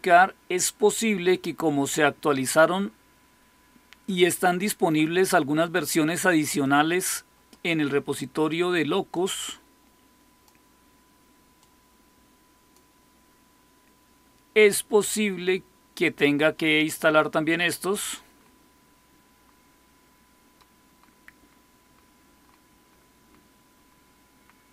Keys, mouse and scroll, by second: 4.7 click, 6.3 click, 9.0-10.4 drag, 11.5-12.6 drag, 12.8 click.